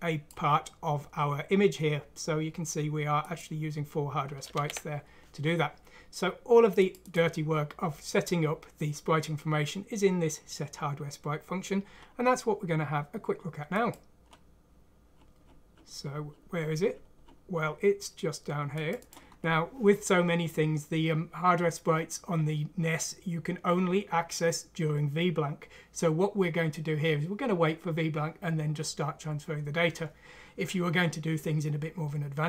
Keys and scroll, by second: 4.5 ctrl+z.